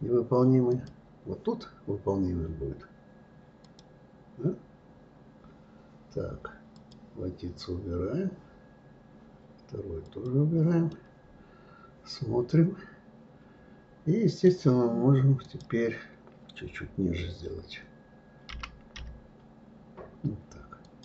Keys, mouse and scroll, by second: 0.7 click, 3.6 click, 6.7 click, 10.0 click, 10.9-13.9 middle drag, 15.4 click.